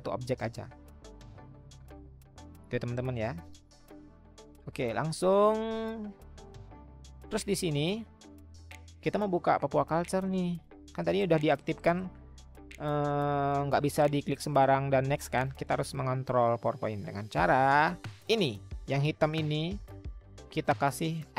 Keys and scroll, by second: 1.2 ctrl+z, 3.4 ctrl+z, 17.3 Escape, 19.9 ctrl+z.